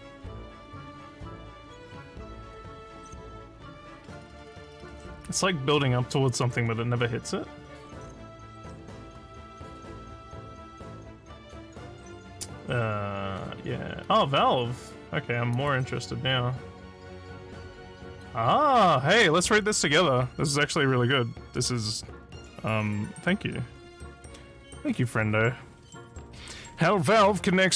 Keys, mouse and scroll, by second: 8.9 click, 11.7 scroll up 1, 13.3 middle click, 15.5 click, 18.1-19.3 drag.